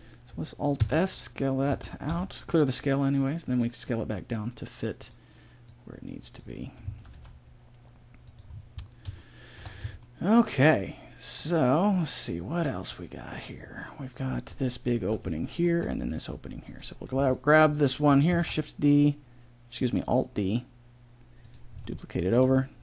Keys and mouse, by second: 0.8 alt+s, 1.7 s, 5.7-7.4 drag, 6.8 s, 8.5-10.1 middle drag, 15.5-16.6 middle drag, 16.6-18.4 right drag, 18.4 alt+d.